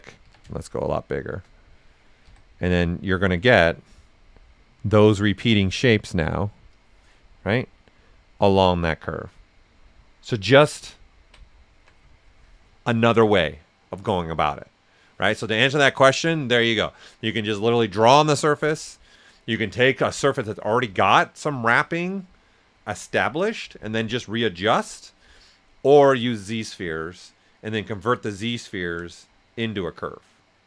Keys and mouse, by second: 0.2 s, 0.3-1.7 drag, 2.2 s, 2.3 click, 4.0 right click, 6.7 click, 7.1 right click, 10.4 alt+right click.